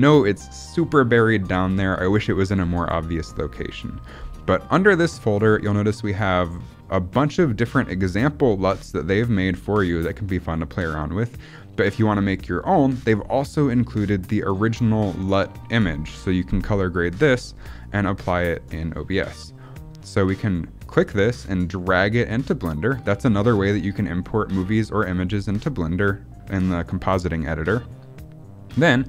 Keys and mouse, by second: 22.9 click, 24.7 middle click, 25.2-26.5 drag, 27.2-28.6 middle drag.